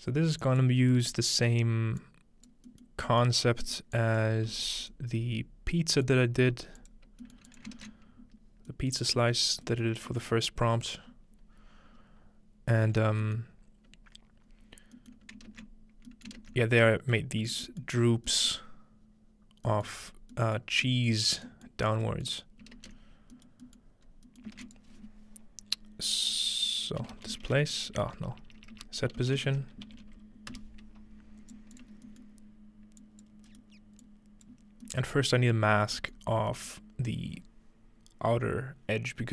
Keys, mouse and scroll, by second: 2.0 click, 3.4-5.3 scroll up 2, 4.0 click, 4.5-5.3 typing, 4.8 click, 6.1 click, 6.4 g, 6.8 click, 7.5 click, 7.7 ctrl+click, 8.7-9.2 ctrl+middle drag, 9.9 shift+middle drag, 10.4-12.1 middle drag, 12.9-14.5 scroll up 2, 13.4-14.5 middle drag, 14.5-15.9 scroll up 1, 15.5 ctrl+space, 15.9-17.4 scroll down 4, 20.1 scroll down 2, 21.5-22.1 middle drag, 22.5-23.7 ctrl+middle drag, 24.1 middle click, 24.1-26.1 scroll up 1, 24.6 typing, 24.7-26.1 shift+drag, 27.0-30.5 typing, 31.5 click, 31.8 click, 33.0 click, 33.7-34.5 scroll up 1, 34.1 click, 34.6 scroll down 2, 34.9 click, 35.1 middle click, 35.4-37.9 scroll down 1, 38.1-39.3 middle drag.